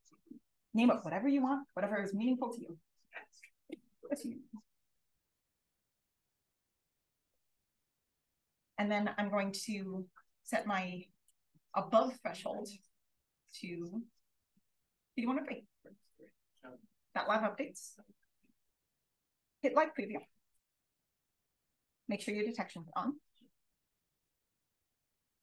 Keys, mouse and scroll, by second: 0.0-0.3 typing, 4.0-6.1 typing, 7.1 click, 10.6 click, 12.0-13.6 scroll down 1, 13.6 click, 13.6-14.4 scroll down 1, 14.4-14.9 scroll down 1, 14.9 click, 14.9-19.1 scroll down 1, 19.1 click, 19.1-20.2 scroll down 1, 20.2 click, 22.9-23.6 scroll down 1, 23.6-25.2 scroll down 1, 24.0 click.